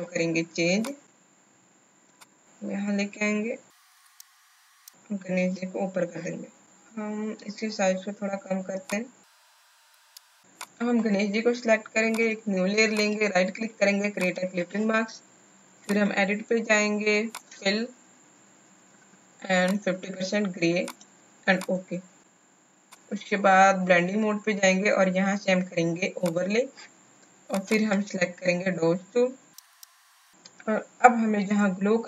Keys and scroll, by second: 4.6 Down, 4.6 Down.